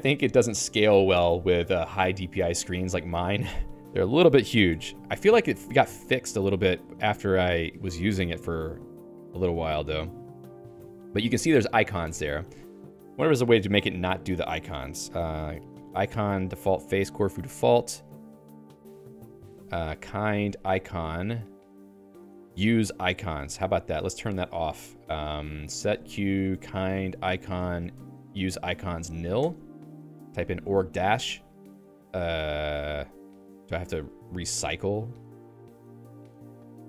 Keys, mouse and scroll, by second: 1.2 Down, 3.4 Up, 3.8 Down, 4.6 Escape, 5.4 ctrl+g, 5.8 a, 6.0 BackSpace, 6.4 -, 7.2 Down, 8.8 Return, 9.4 BackSpace, 11.2 -, 12.0 Escape, 12.6-15.9 typing, 18.2-21.5 typing, 21.6 ctrl+j, 22.0 ctrl+j, 22.1 ctrl+j, 23.5 ctrl+g, 24.0 k, 24.4 alt+:, 24.6 alt+(, 25.6-31.3 typing, 29.4 Return, 32.0 Down, 33.4 ctrl+g, 34.0 ctrl+g.